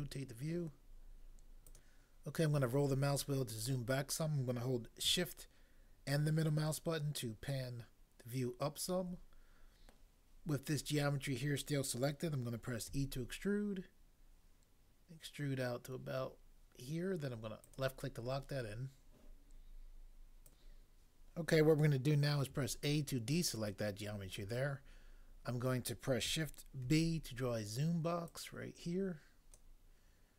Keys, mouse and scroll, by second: 2.9 scroll down 1, 12.9 e, 20.5 click, 22.5 a, 26.8 b, 28.3 click.